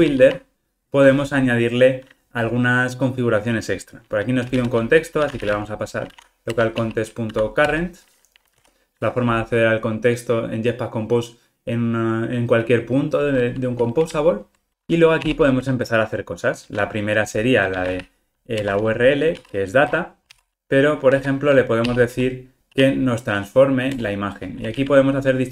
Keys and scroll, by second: 6.6 Return, 18.6 Return, 20.2 super+v, 24.0 Return, 24.7 super+p.